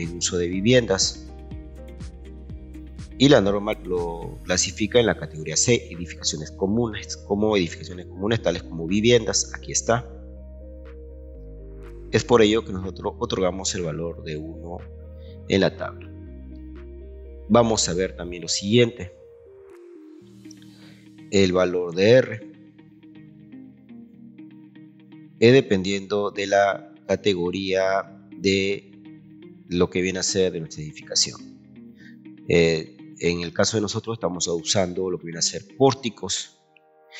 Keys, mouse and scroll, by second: 0.9 middle click, 16.3 scroll down 1, 17.4 scroll down 1, 18.2-18.6 scroll down 2.